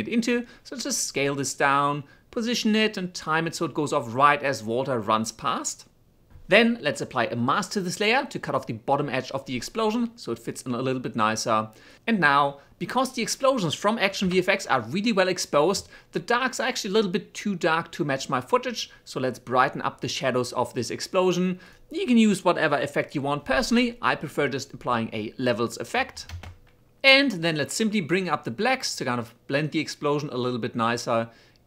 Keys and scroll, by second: 9.8 m, 11.4 4, 17.8 shift+space, 18.7 shift+space, 24.0-25.2 typing.